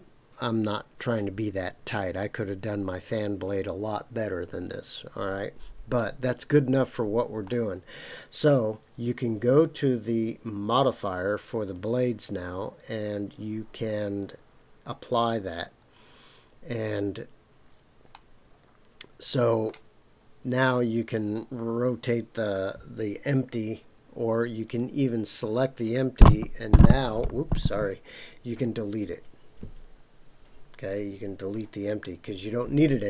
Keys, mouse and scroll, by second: 5.9-7.5 middle drag, 11.6 click, 14.2-15.3 drag, 18.1-19.7 middle drag, 24.6 click, 28.5 Delete, 31.5 Delete.